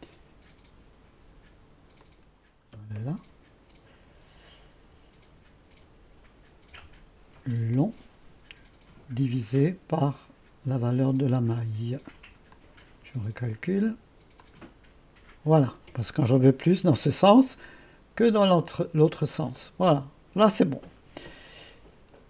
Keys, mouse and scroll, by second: 4.0-5.8 typing, 6.8-7.7 typing, 11.6 click, 12.6 click, 14.4 click, 18.8 click, 19.2 space.